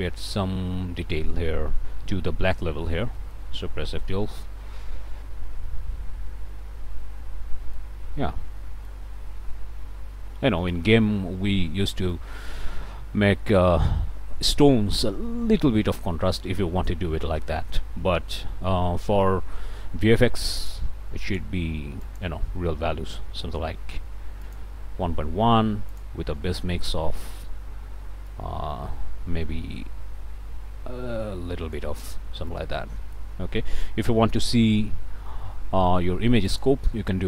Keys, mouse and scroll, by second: 0.6-0.9 scroll up 1, 2.7 scroll down 1, 3.2 click, 4.2 F12, 7.7-9.1 drag, 10.6 click, 12.1-16.5 drag, 17.1 middle click, 17.5 click, 20.5 click, 21.2 click, 22.0 click, 24.4 click, 25.9 click, 28.3-31.9 drag, 32.5 ctrl+right click, 34.4 n, 36.5 click.